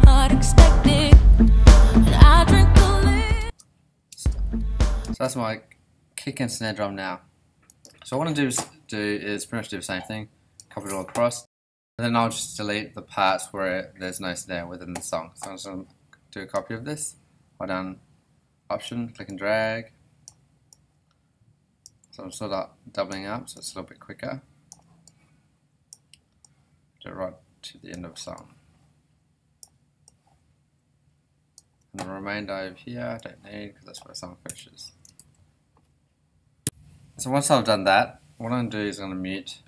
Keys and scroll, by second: 3.4 space, 11.1 super+s, 34.5 BackSpace, 35.1 super+BackSpace, 35.2 super+s.